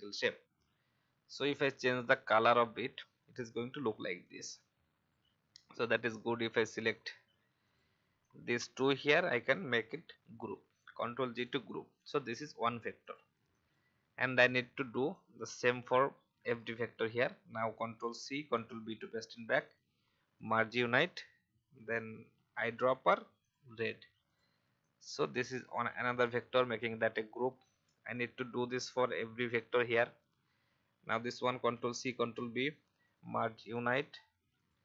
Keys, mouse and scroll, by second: 11.3 click, 16.3 alt+scroll up 1, 19.6 click, 22.3 i, 23.4 click, 26.8 alt+scroll down 1, 27.4-28.0 scroll down 1, 28.1 click, 30.0-30.6 alt+scroll up 1, 33.1 click.